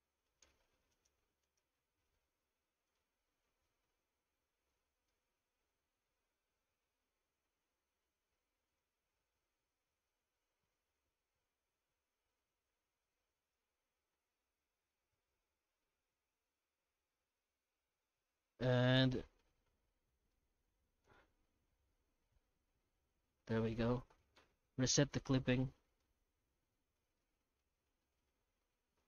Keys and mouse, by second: 0.0 shift+z, 0.9 alt+shift+right click, 1.4 alt+shift+right click, 2.0 Tab, 2.4 shift+q, 5.1 middle click, 6.7 F9, 14.9-15.2 middle drag, 15.6 shift+middle drag, 17.1-17.4 middle drag, 17.7-18.3 middle drag, 18.6 F9, 23.7 middle click, 24.6 F9.